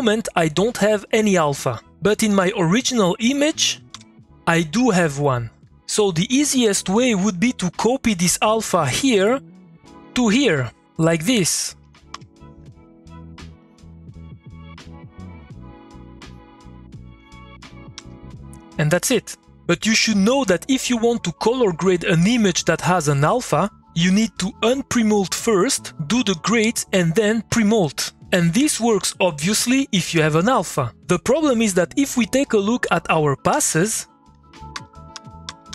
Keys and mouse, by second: 3.5 click, 3.9 3, 9.5 middle click, 10.0 click, 11.8 middle click, 12.1 k, 12.6-15.8 drag, 15.8 middle click, 16.3 click, 17.9 2, 31.7 middle click, 32.5 click, 33.5-35.7 typing, 34.3 click.